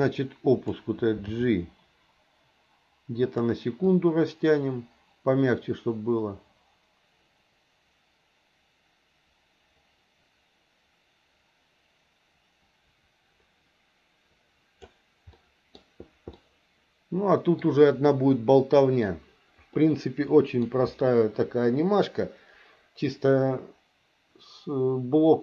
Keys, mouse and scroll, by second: 0.0 click, 1.3 g, 3.9-14.9 drag, 15.3 middle click, 16.3-17.6 middle drag, 19.7 middle click.